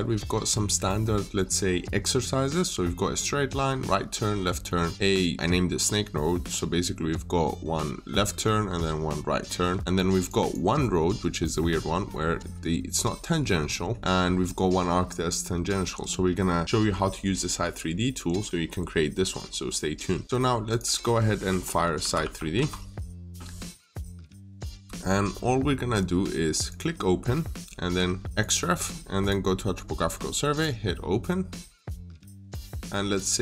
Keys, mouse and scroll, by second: 4.5 middle click, 4.9 scroll up 1, 5.0-5.5 scroll down 1, 5.6 scroll up 1, 6.3 click, 6.6-8.2 scroll down 1, 8.2 middle click, 9.8 Escape, 10.0 click, 10.2 double click, 10.6 middle click, 11.2-13.4 scroll up 1, 13.4 scroll down 1, 13.6 middle click, 14.0-15.7 scroll up 1, 15.7 Escape, 20.5 click, 23.2 Return, 26.5 click, 28.2 double click, 29.0 click.